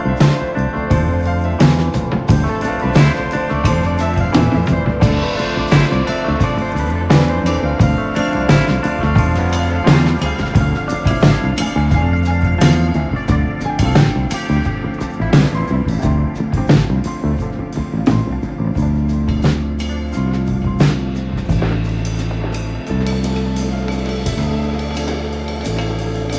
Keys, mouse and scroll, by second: 1.9 click, 2.8 s, 5.6 KP_1, 6.1 ctrl+r, 7.3 ctrl+r, 8.4 ctrl+r, 8.8 click, 9.2 /, 9.6-9.9 scroll down 6, 9.9 KP_7, 10.4 Tab, 10.6-10.9 scroll up 3, 10.9-11.3 shift+middle drag, 11.3 click, 11.8 r, 13.1-13.4 scroll up 2, 13.4 click, 14.8 r, 15.8 click, 17.2 scroll down 1, 17.4 shift+middle click, 17.8 click, 18.3 r, 19.3 click, 20.8 r, 22.1 scroll down 1, 22.2 shift+middle click, 22.7 scroll up 1, 22.8 click, 23.2 r, 25.6 scroll down 2, 25.8 middle click, 26.1 click, 26.2 scroll down 1.